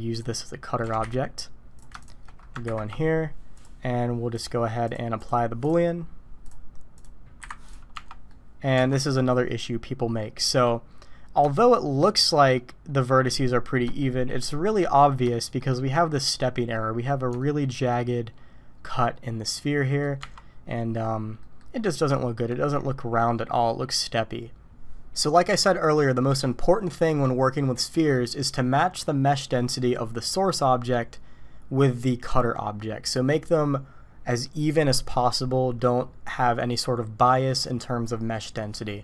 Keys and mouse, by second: 0.3-0.6 drag, 0.8 g, 2.6 ctrl+KP_Subtract, 3.5 click, 4.3 click, 4.8 click, 5.1 click, 5.6 click, 7.4 Delete, 7.9 Tab, 8.2 click, 8.8 alt+a, 10.2 click, 11.5 shift+click, 11.7 shift+middle click, 11.9 shift+click, 12.1 shift+middle click, 14.0 shift+middle click, 15.3 shift+middle click, 17.3 shift+middle click, 19.8 click, 20.2 Tab, 20.7 click, 20.9 middle click, 21.4 click, 22.1 shift+drag.